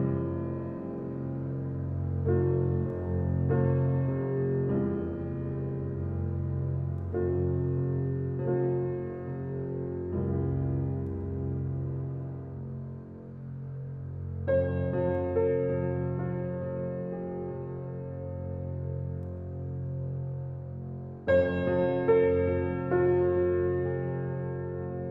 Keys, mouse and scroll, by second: 0.6 r, 4.1 s, 6.2 g, 7.4 click, 7.7-8.4 middle drag, 8.4 scroll up 4, 8.7 shift+middle click, 9.3 shift+click, 9.7 shift+click, 9.9-10.2 scroll up 4, 10.2-11.1 shift+middle drag, 11.1 s, 12.8-14.2 drag, 14.2 s, 15.3-16.3 drag, 16.3 s, 18.2-18.9 scroll down 2, 18.9 Tab, 20.1 ctrl+r, 21.1-21.9 scroll down 4, 21.9 ctrl+r, 22.8 middle click, 23.6 scroll up 1, 23.8 ctrl+r, 24.9-25.1 scroll up 4.